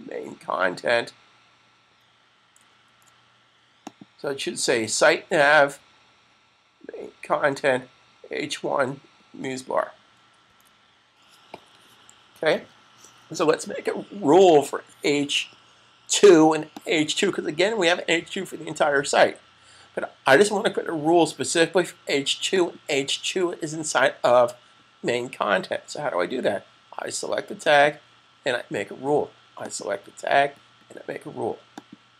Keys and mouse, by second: 2.6 super+z, 3.7 click, 10.2 super+s, 16.8 click, 22.4 click, 27.5 click.